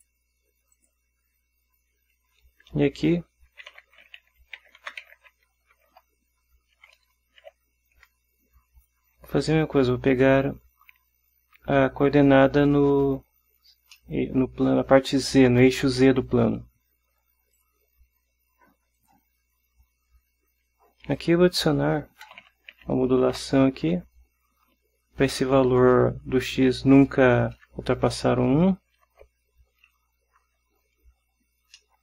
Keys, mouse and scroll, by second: 0.1 click, 0.9 click, 2.4 Delete, 3.6-5.9 typing, 6.9 ., 7.6 z, 9.0 BackSpace, 14.1-15.1 drag, 17.7 click, 19.1 click, 21.3 click, 22.4 m, 22.6 o, 22.9 d, 23.4 shift+9, 24.1 Right, 26.7-28.5 typing, 31.9-32.0 drag.